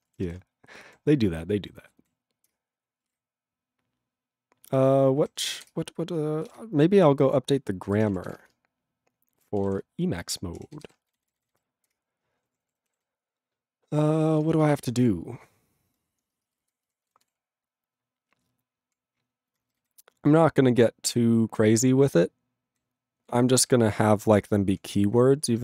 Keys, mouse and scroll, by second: 0.0 Return, 2.5 ctrl+Return, 5.2 ctrl+g, 5.7 Return, 12.0 ctrl+Return, 12.5 ctrl+=, 13.0 ctrl+n, 14.8 alt+>, 15.1 ctrl+p, 16.3 ctrl+space, 16.8 ctrl+alt+f, 16.9 ctrl+g, 17.2 ctrl+s, 17.4 ctrl+p, 19.5 ctrl+n, 19.9 ctrl+p, 22.0 ctrl+n, 22.5 ctrl+n, 23.4 ctrl+p, 25.1 ctrl+n, 25.4 ctrl+e.